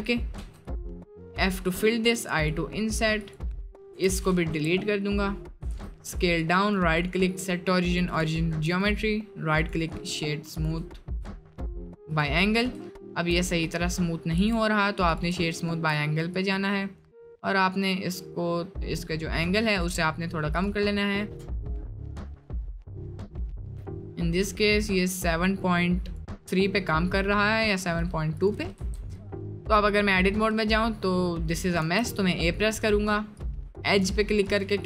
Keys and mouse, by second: 0.3 f, 2.1 i, 4.0 Delete, 4.6 Tab, 4.8 middle click, 5.6 s, 6.7-8.1 drag, 8.4 shift+middle drag, 8.8-9.7 drag, 10.6 drag, 11.0 shift+middle click, 11.8 middle click, 13.0 shift+middle drag, 13.5 middle drag, 13.9 middle drag, 15.1 click, 15.6 shift+middle click, 16.4-19.9 drag, 20.5 click, 20.8 middle drag, 21.3 middle drag, 22.4 click, 22.7-26.1 drag, 28.8 Tab, 29.1 middle click, 30.4 middle click, 30.9 middle click, 31.8 a, 33.4-34.6 drag.